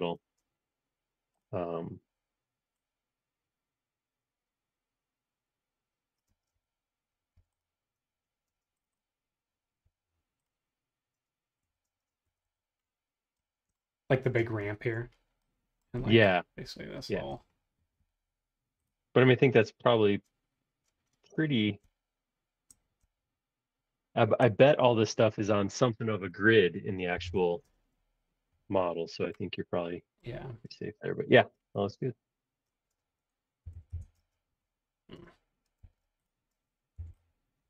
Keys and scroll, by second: 6.3 space, 7.3 b, 8.4 space, 9.8 b, 11.7 Escape, 11.9 space, 12.2 Escape, 12.4 Escape, 17.9 r, 27.3 p, 33.4-34.2 typing, 35.8 super+z, 36.9 p.